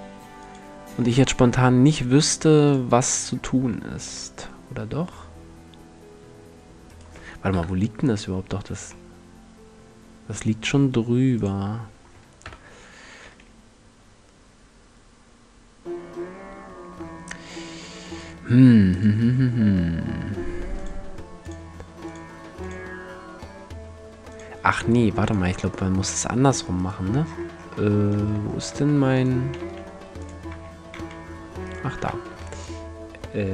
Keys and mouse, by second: 0.2-2.0 drag, 3.7 g, 6.6 click, 7.2 KP_7, 9.5-10.1 drag, 11.0 click, 12.0 KP_1, 12.2 click, 12.8 g, 17.9-20.4 drag, 20.4 middle click, 20.4-24.1 drag, 24.1 middle click, 24.8-26.0 drag, 27.7 Tab, 28.4 Tab, 29.2 x, 30.1 a, 30.6 a, 31.9 x.